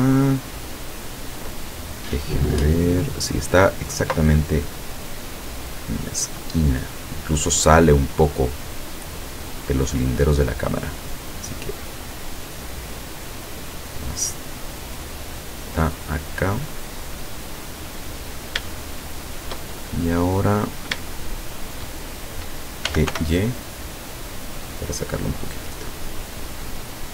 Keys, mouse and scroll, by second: 4.7-6.5 drag, 6.5-7.5 middle drag, 7.7-8.0 scroll down 2, 8.3-9.8 middle drag, 10.3-13.4 drag, 14.3-17.8 drag, 18.0-18.6 scroll up 2, 19.1 shift+middle click, 19.7 shift+scroll up 2, 20.0 shift+middle click, 21.3 shift+middle click, 22.9 g, 23.2 y.